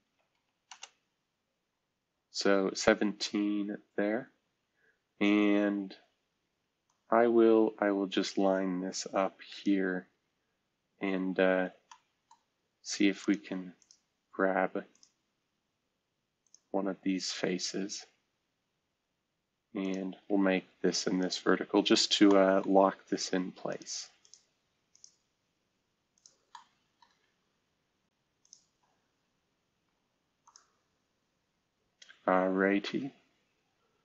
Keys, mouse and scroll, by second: 0.0 typing, 0.6 Return, 1.7-3.0 scroll up 1, 3.0-3.7 scroll down 1, 3.7-4.4 scroll up 1, 5.0-6.5 scroll down 1, 6.8-9.8 drag, 11.4-12.3 scroll down 2, 13.2-14.6 drag, 18.0 Escape, 22.0-23.1 scroll up 1, 26.5 middle click, 29.7 v, 31.1-32.1 scroll down 1, 32.6-33.6 scroll up 1.